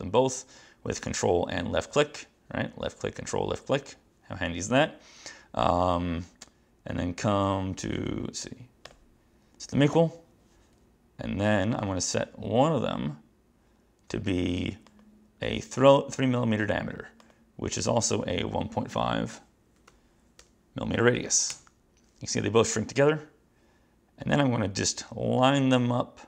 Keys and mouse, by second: 9.0 click, 11.9 click, 14.5 click, 15.0 click, 15.6 click, 17.3 click, 18.2 click, 19.7-21.0 typing, 21.6 Return.